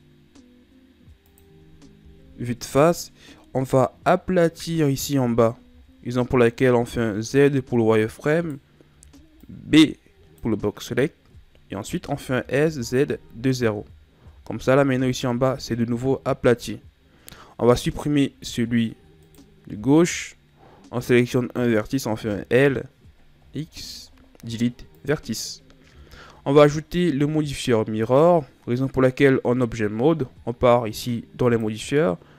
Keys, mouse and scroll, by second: 2.2 KP_1, 5.1-5.6 ctrl+scroll up 1, 5.6-6.5 shift+scroll down 2, 6.7 z, 8.2 right click, 8.8 b, 12.1 s, 14.2 z, 14.8 Tab, 17.6 Tab, 19.1 right click, 22.1 l, 23.3 x, 25.7 Tab, 31.3 click.